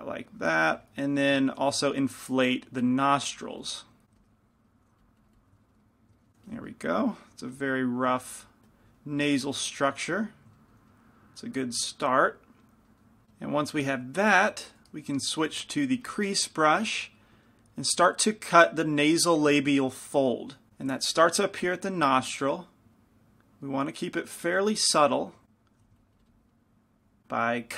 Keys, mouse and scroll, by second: 0.7 f, 2.0 f, 2.4-4.7 drag, 2.9 f, 4.2 f, 6.1 middle click, 6.6 f, 12.1 click, 14.3 middle click, 15.1 shift+c, 15.1 shift+f, 16.2 f, 17.0 f, 21.1 f, 22.4-24.4 drag, 24.7 f, 25.8 f, 27.4 f.